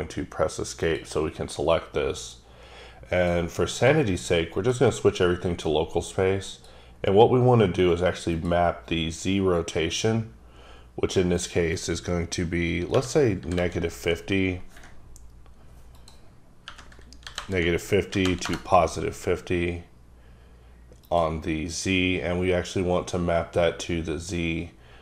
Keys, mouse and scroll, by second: 0.8 click, 2.2 click, 3.2 click, 3.8 click, 4.5 click, 6.5 click, 8.4 click, 11.4 click, 12.9 KP_Subtract, 13.4 KP_5, 13.6 KP_0, 16.0 click, 16.6 KP_Subtract, 17.2 KP_5, 17.4 KP_0, 18.1 KP_5, 18.3 KP_0, 18.5 KP_Enter, 21.0 click, 22.0 scroll down 3.